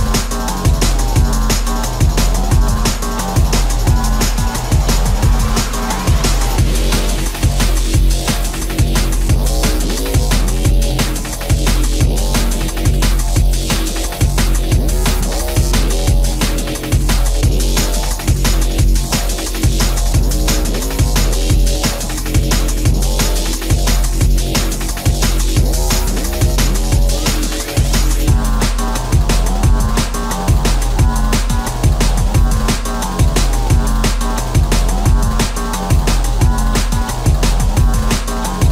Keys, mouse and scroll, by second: 1.9 space, 2.9 shift+middle click, 7.3 f, 12.0 shift+middle click, 12.4 space, 31.9 space, 34.1 m.